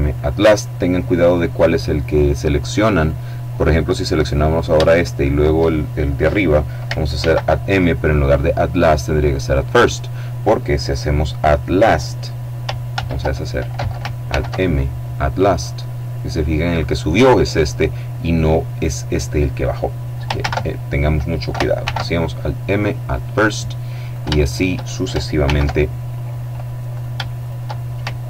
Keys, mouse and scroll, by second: 2.5 right click, 4.4 shift+right click, 6.6 alt+m, 9.1 click, 12.4 ctrl+z, 13.7 alt+m, 14.9 click, 19.9 ctrl+z, 21.3 alt+m, 22.3 click, 23.5 shift+right click, 24.9 alt+m, 25.5 alt+click, 26.4 shift+right click, 27.8 alt+m.